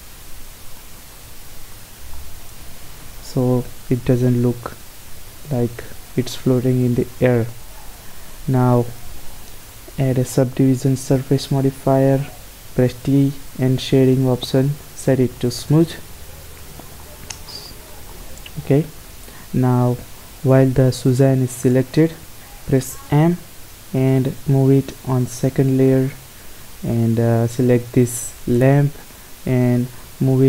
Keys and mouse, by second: 0.0 z, 0.4 z, 0.7 middle click, 5.7-8.1 drag, 11.1 t, 15.4-17.4 drag, 16.0 t, 17.4 middle click, 17.9 middle click, 21.4 middle click, 22.8 m, 26.8-28.6 right drag, 30.0 m.